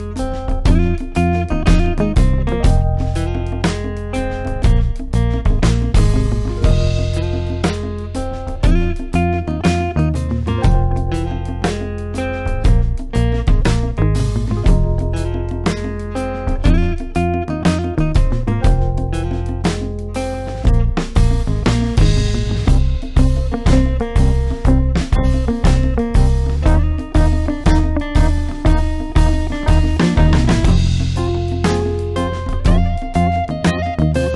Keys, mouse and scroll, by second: 3.1-3.8 click, 7.6-8.2 drag, 14.4-15.3 drag, 20.4 click, 23.8 click, 28.6 click.